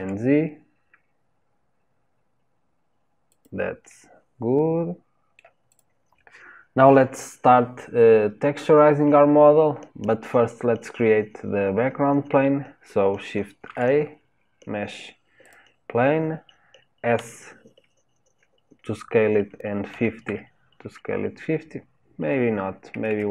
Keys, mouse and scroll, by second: 3.9-5.7 middle drag, 5.7 click, 13.7 shift+a.